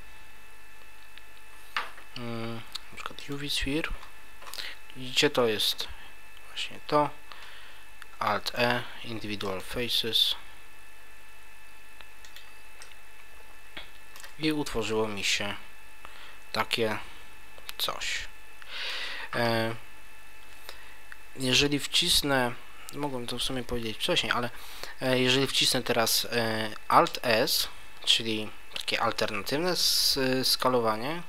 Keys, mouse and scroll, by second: 3.9-4.4 scroll up 1, 6.2 Tab, 6.2 scroll up 6, 8.5 alt+e, 12.4 click, 12.8 middle click, 14.4 Tab, 14.8 middle click, 19.0 Tab, 31.0 alt+s.